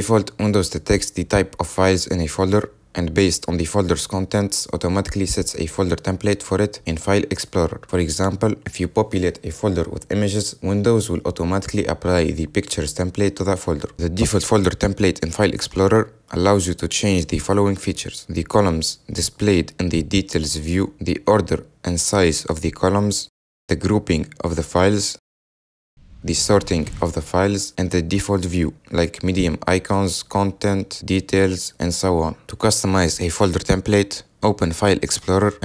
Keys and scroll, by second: 8.8 ctrl+v, 34.4 super+e.